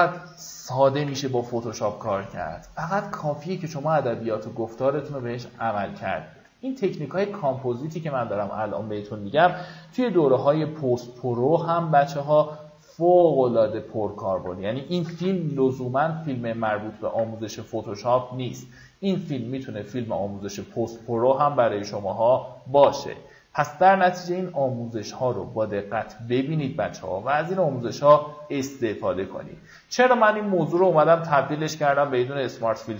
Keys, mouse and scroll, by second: 1.3 x, 1.7 alt+right click, 3.1 alt+right click, 3.7-5.2 drag, 5.6 x, 6.0-7.8 drag, 8.0-8.5 alt+scroll down 2, 9.8 v, 10.3 alt+scroll up 1, 12.1 ctrl+click, 13.6 alt+click, 16.4 click, 17.6 alt+scroll up 1, 18.1-18.5 alt+scroll up 2, 19.0 right click, 20.1 click, 21.4-26.2 shift+drag.